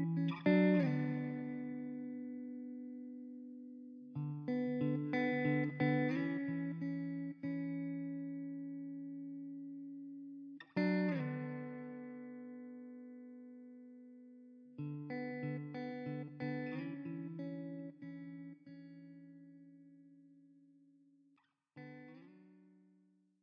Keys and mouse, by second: 3.9 alt+middle click, 5.2 middle click, 6.8 shift+f, 7.9 middle click, 10.5 middle click, 12.4 middle click, 13.6 middle click, 14.7 ctrl+alt+middle click, 16.1 middle click.